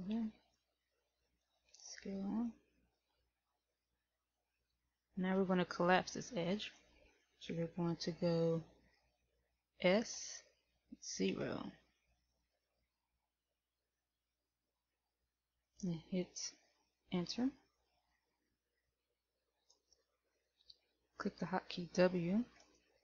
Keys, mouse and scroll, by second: 0.9 shift+middle click, 1.9-2.3 scroll up 1, 2.9 shift+middle click, 10.4 s, 22.8 w.